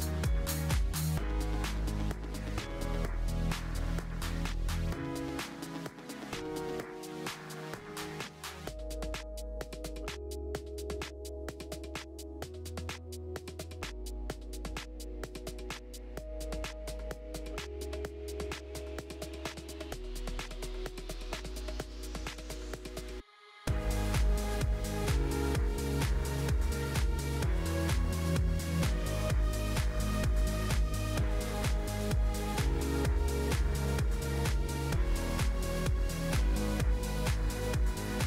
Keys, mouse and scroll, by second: 0.6 click, 1.1 s, 3.1 click, 3.4-4.1 scroll up 1, 4.1 g, 5.9 click, 6.5 click, 9.1 click, 20.7 shift+a, 21.2-21.9 scroll up 1, 21.9 g, 23.6 click, 24.5 g, 25.9 click, 26.7-29.5 drag, 29.5 KP_0, 30.8 click, 31.5 click, 34.2-34.7 scroll up 4, 37.5 click.